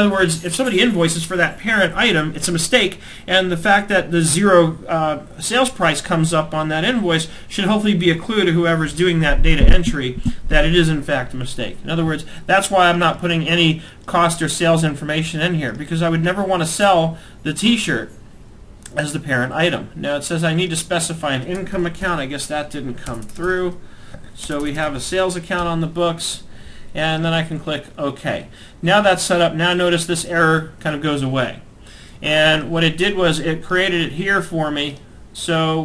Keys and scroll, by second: 22.6 BackSpace, 25.6 Tab.